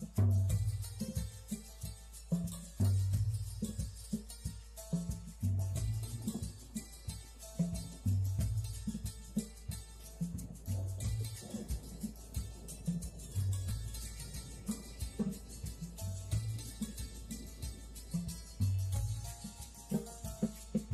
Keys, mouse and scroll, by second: 0.0 shift+a, 0.2 click, 1.5 click, 2.4 click, 3.4 t, 6.5 click, 7.4 click, 8.1 click, 10.1 shift+middle click, 12.1 middle click, 12.6 click, 13.1 middle click, 13.7 click, 14.6 middle click, 15.6 shift+middle click, 16.4 scroll down 2, 17.0 click, 17.8 s, 18.1 scroll down 2, 19.2 click, 19.5 middle click, 19.8 shift+middle click, 20.0 middle click, 20.4 middle click.